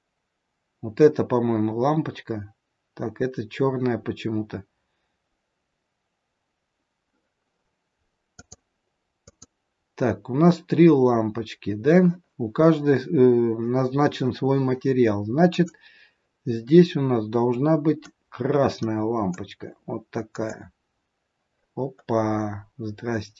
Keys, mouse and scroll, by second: 8.3 click, 9.2 click, 15.4 click, 21.7 scroll down 4, 23.1 scroll up 3.